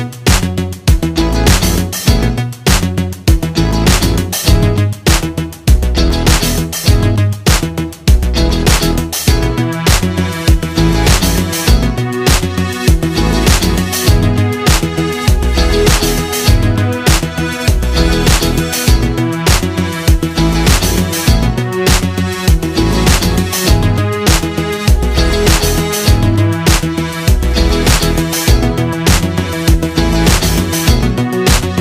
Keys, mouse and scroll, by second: 2.5-9.7 shift+drag, 13.0-16.4 drag, 21.5-31.8 drag.